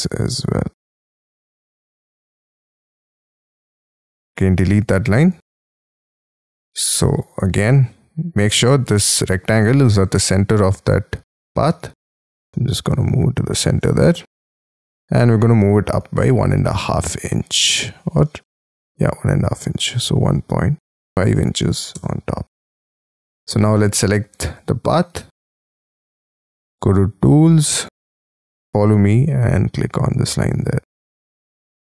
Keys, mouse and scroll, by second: 1.2 space, 1.3-1.9 scroll up 3, 1.9-2.7 scroll up 1, 2.7 l, 3.7 e, 5.4 space, 6.1-7.4 scroll down 32, 7.4-10.0 scroll up 14, 10.0 double click, 10.6-11.3 scroll up 11, 11.3 m, 12.3 scroll down 5, 13.5 shift+click, 14.8 ,, 16.7 m, 18.1 Up, 19.4 1, 20.8-22.4 typing, 21.9 Return, 22.6-25.3 scroll down 51, 25.3-27.7 scroll up 34, 28.5-29.0 scroll up 1, 29.0-30.0 scroll up 3, 30.6-31.9 scroll down 33.